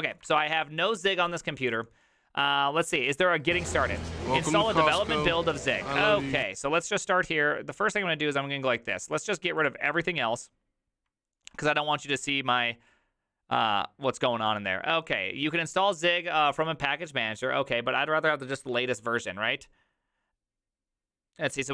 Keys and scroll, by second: 0.0 ctrl+c.